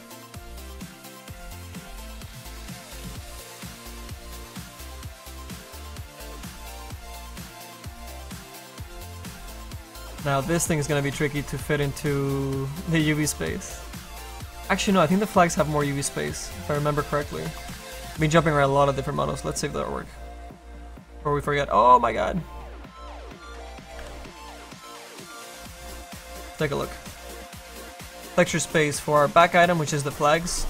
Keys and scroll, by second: 23.7 a, 23.8 a, 27.2 space, 29.0 space.